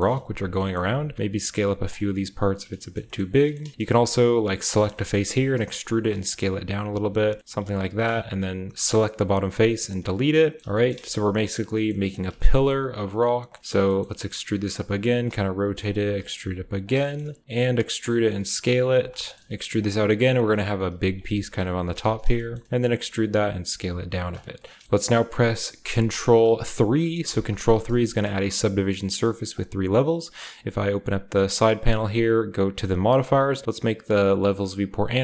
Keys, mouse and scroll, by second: 0.4 alt+middle click, 0.8 typing, 1.7-2.9 drag, 3.0-5.2 shift+middle drag, 4.5 shift+click, 5.2-7.7 typing, 5.8 shift+click, 6.2 shift+click, 6.7 click, 7.1 click, 8.5 middle click, 9.0 x, 9.8-13.9 middle drag, 9.8-10.6 scroll down 1, 11.4-12.9 shift+scroll up 1, 11.8 typing, 12.9-13.9 shift+scroll down 1, 14.1-15.7 shift+scroll up 1, 14.3-16.5 typing, 14.6 shift+click, 15.0 shift+click, 15.8 click, 16.4 click, 16.8 click, 16.9 shift+middle click, 17.6-19.6 typing, 17.9 middle click, 18.6 middle click, 18.9 middle click, 19.1 shift+middle click, 20.4 click, 20.9-24.0 typing, 21.1 click, 21.4 click, 21.7 click, 22.5 shift+middle click, 22.5-23.9 shift+scroll up 1, 24.3 click, 24.3-24.8 scroll down 1, 24.8 Tab, 27.2 ctrl+3, 29.5 middle click, 31.5 middle click.